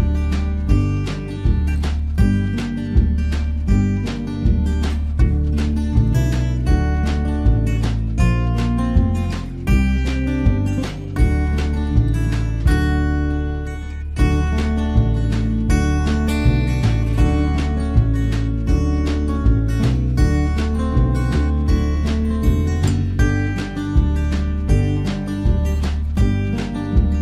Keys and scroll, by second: 9.0 ctrl+b.